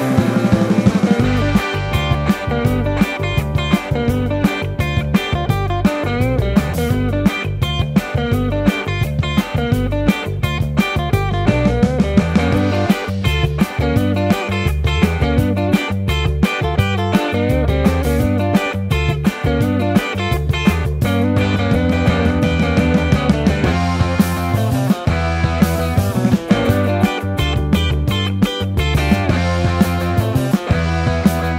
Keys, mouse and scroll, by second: 0.0-4.1 typing, 1.3 ctrl+z, 1.7 Tab, 2.1 Tab, 3.0 ctrl+z, 3.1 Tab, 3.7 Tab, 5.5 ctrl+z, 7.6 Tab, 7.6 KP_1, 9.9 Tab, 10.2-12.6 typing, 13.7 KP_7, 14.6 r, 15.6 Tab, 16.0 Tab, 16.3 p, 16.5 Tab, 17.3 ctrl+z, 19.5 KP_1, 21.8 KP_1, 22.9 Tab, 23.1 Tab, 23.2 Tab, 24.9 i, 25.9 s, 27.9 ctrl+r, 29.0 Tab, 29.2 alt+z, 29.4 Tab, 29.9 3, 30.3 e, 30.9 Tab, 31.2 KP_1.